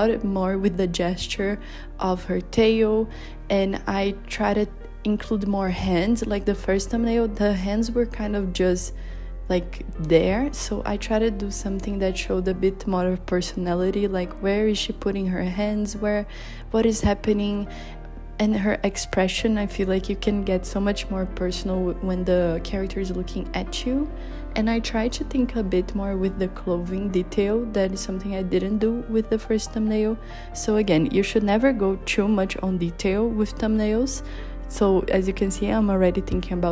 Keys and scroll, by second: 22.0 z, 23.0 z, 27.0 i, 27.4 b, 36.3 i, 36.6 b.